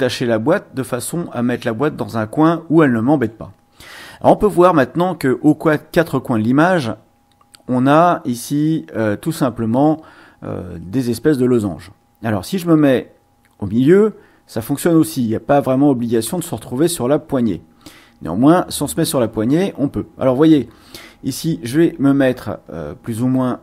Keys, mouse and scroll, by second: 1.0-3.4 drag, 12.6 click, 14.9 click, 16.4-23.6 drag.